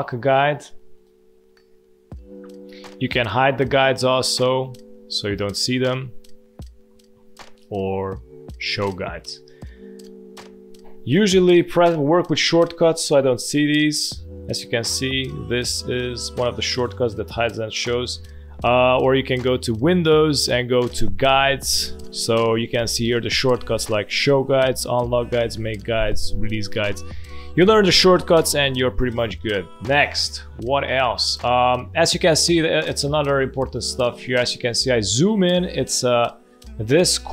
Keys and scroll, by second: 13.3 ctrl+:, 14.0 ctrl+:, 14.5 ctrl+:, 14.9 ctrl+:, 15.3 ctrl+:, 15.8 ctrl+:, 16.3 ctrl+:, 16.9 ctrl+:, 17.7 ctrl+:, 30.3 space, 33.3 space, 34.2 space.